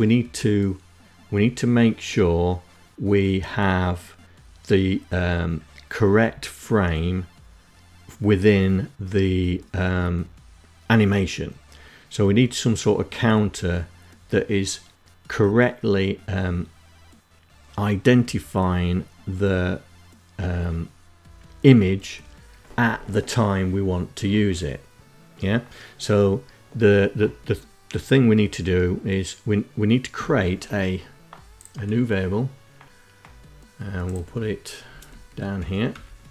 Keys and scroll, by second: 33.9 Down, 34.1 Down, 34.6 End, 34.9 Return, 35.9 Return.